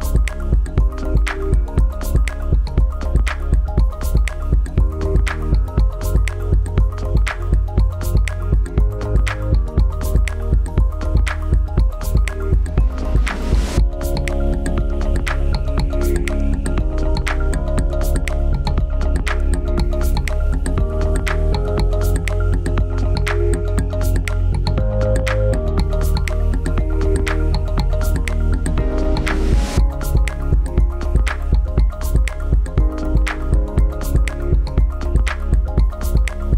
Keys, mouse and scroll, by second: 2.4 click, 7.5 right click, 8.5 click, 15.4 scroll up 1, 18.0 click, 22.8 click, 36.4 click.